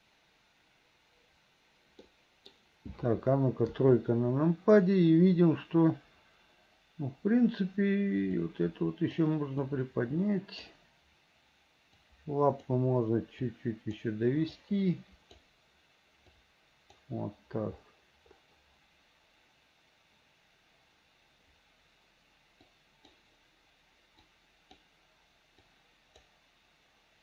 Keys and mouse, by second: 2.2 middle click, 3.8 KP_3, 8.5 click, 9.9 click, 12.1 click, 13.6 click, 14.7 click, 16.5 click, 22.8 click, 24.4 click, 25.8 click.